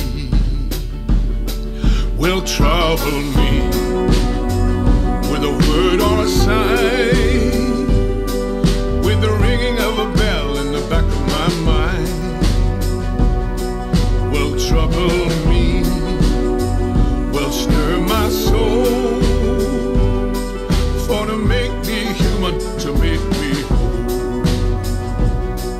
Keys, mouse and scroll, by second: 0.3-1.6 middle drag, 0.3-0.8 scroll down 4, 0.8 scroll, 12.6-13.7 middle drag, 12.8-13.1 scroll, 13.7 scroll up 8, 13.8-14.7 scroll down 8, 14.7-15.7 scroll up 11, 15.7-16.1 m, 16.9-18.0 drag, 18.6-20.0 middle drag, 18.8-19.1 scroll, 19.7 scroll, 20.0 t, 20.5-24.3 middle drag, 20.5-22.1 scroll, 22.1 scroll.